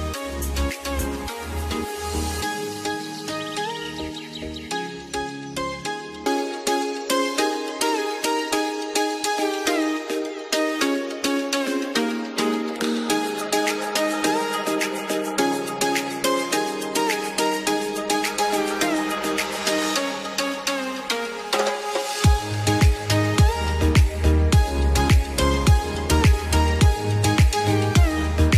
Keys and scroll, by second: 1.3 ctrl+g, 11.9 F2, 15.2 l, 28.4 F2.